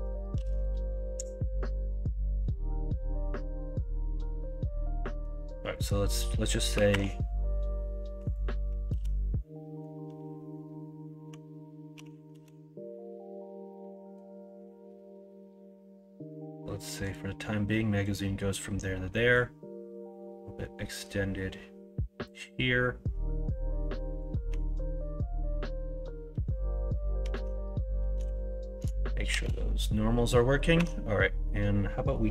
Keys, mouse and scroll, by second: 0.3 KP_1, 0.6 KP_3, 6.7 e, 8.9 ctrl+z, 11.9 e, 24.4 Tab, 27.3 Tab, 28.1 l, 29.3 shift+n, 30.7 Tab.